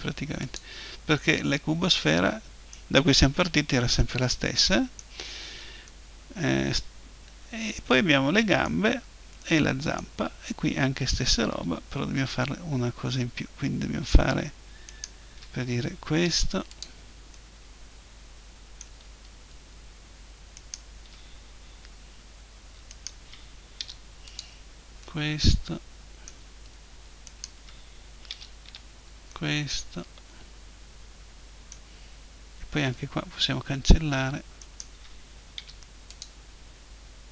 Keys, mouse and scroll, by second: 0.6 middle click, 0.7-1.1 scroll up 1, 1.1 middle click, 1.8 middle click, 2.0 middle click, 3.2-7.7 middle drag, 9.0-14.2 middle drag, 14.9-16.7 right drag, 16.3 Delete, 19.3-20.5 middle drag, 20.5-22.5 right drag, 22.4 middle click, 22.9-24.5 right drag, 23.8 Delete, 24.5-25.5 middle drag, 27.3-28.3 right drag, 28.3 Delete, 29.0 click, 29.2-30.8 middle drag, 34.6-36.3 right drag, 35.6 Delete.